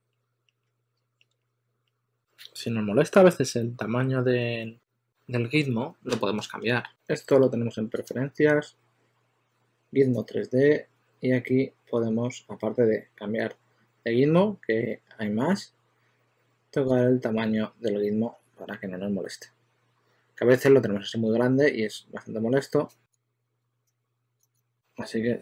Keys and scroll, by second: 6.9 typing.